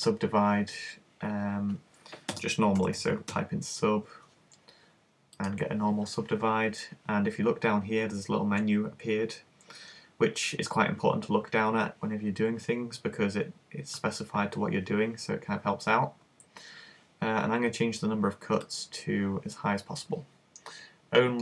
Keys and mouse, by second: 2.4 space, 18.9-20.5 drag.